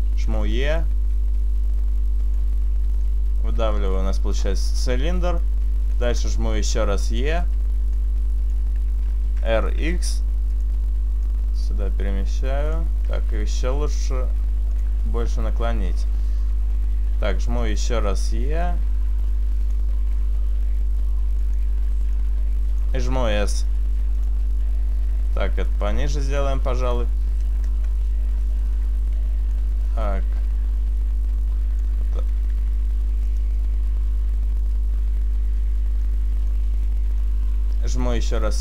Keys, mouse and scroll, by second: 0.4 e, 0.9 right click, 0.9 click, 3.1 shift+middle click, 3.7-4.5 scroll up 1, 4.5-5.5 scroll up 3, 5.5 shift+middle click, 8.0 right click, 8.0 click, 8.0 e, 9.4 r, 11.3 click, 12.4 click, 13.1 r, 15.6 click, 17.7 e, 18.3 right click, 18.3 click, 21.5 r, 22.9 click, 24.0 s, 24.3 click, 25.8 alt+shift+right click, 27.1 click, 29.6 alt+shift+right click, 32.6 s, 34.5 click, 34.5 middle click, 36.6 middle click, 38.1 e.